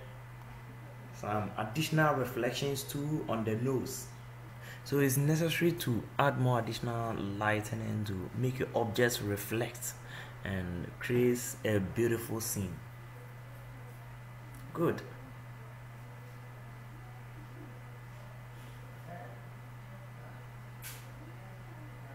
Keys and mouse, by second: 15.3-18.2 drag.